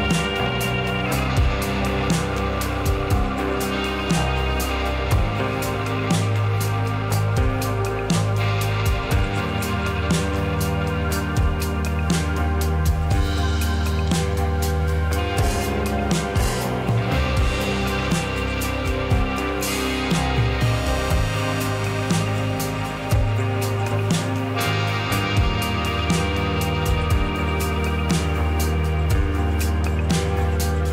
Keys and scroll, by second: 6.6 u, 16.5 Page_Up.